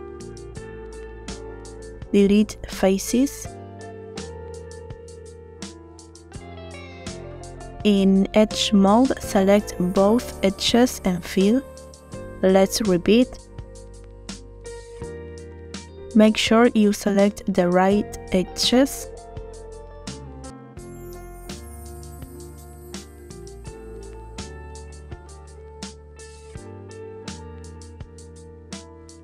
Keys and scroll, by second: 0.9 3, 2.0 Delete, 5.8 Delete, 9.1 shift+f, 13.3 shift+f, 13.9 shift+f, 20.4 shift+f.